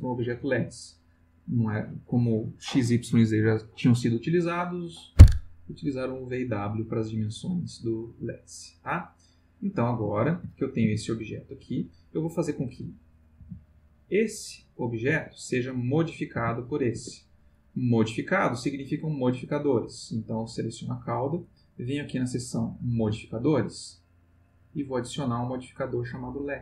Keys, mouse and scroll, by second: 6.7-7.3 middle drag, 8.1 middle click, 9.3 click, 10.2 ctrl+middle click, 10.8 ctrl+g, 11.6 Escape, 12.5 click, 13.4 g, 15.1 Escape, 15.9 click, 16.3 g, 16.9 Escape, 17.6 click, 21.7 click, 25.0 click, 26.5 click.